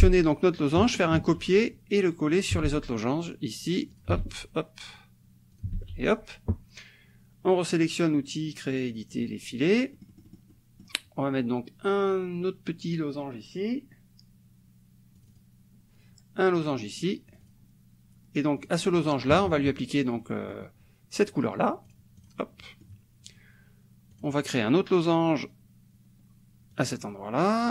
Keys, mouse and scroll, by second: 0.2 click, 1.1 ctrl+c, 2.4 ctrl+click, 2.6 ctrl+v, 3.9 ctrl+click, 4.2 ctrl+v, 5.5 ctrl+click, 5.7 ctrl+v, 9.1 click, 9.9-11.0 drag, 15.2 click, 17.3 click, 18.6 click, 19.3 KP_Subtract, 20.2 middle click, 20.4-22.1 drag, 22.6 click, 24.1 click, 26.7 click.